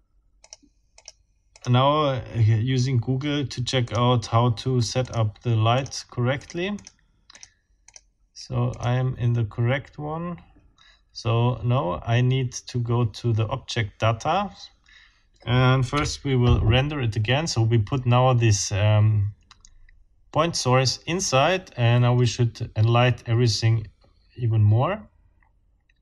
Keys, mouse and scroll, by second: 0.4 click, 0.9 click, 1.5 click, 3.9 click, 5.0 click, 5.8 click, 6.4 click, 6.8 click, 7.3 click, 7.9 click, 8.7 click, 15.9 F12.